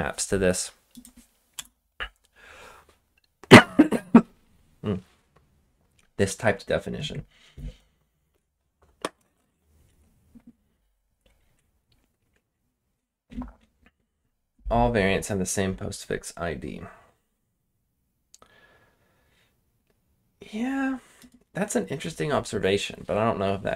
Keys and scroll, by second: 1.5 Return.